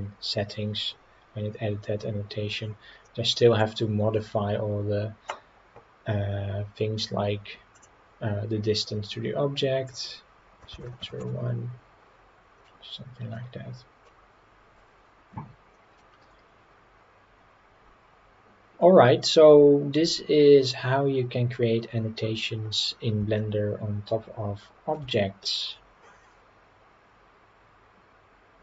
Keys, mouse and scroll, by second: 3.0-3.6 middle drag, 8.8 click, 9.8-12.2 drag, 12.7-13.3 middle drag, 13.6 scroll up 1, 14.0-16.0 middle drag, 23.3-24.9 shift+middle drag.